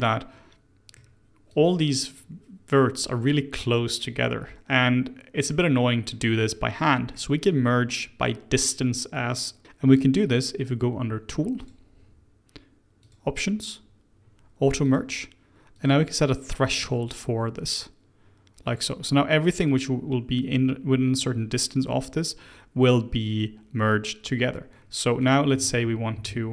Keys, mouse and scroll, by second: 1.4 click, 3.5 click, 5.4-6.0 scroll down 2, 6.0-9.1 middle drag, 11.5 click, 12.9-14.9 drag, 15.7-19.8 drag, 24.6-25.1 scroll up 1, 25.1 click, 26.1 2.